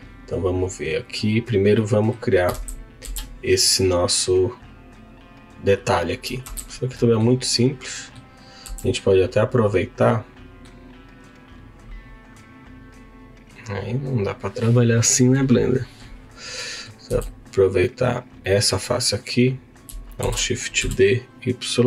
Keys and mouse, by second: 1.7 middle click, 6.9 middle click, 7.9 middle click, 16.6 middle click, 17.1 3, 17.9 click, 18.4 middle click, 20.2 shift+d, 20.8 y.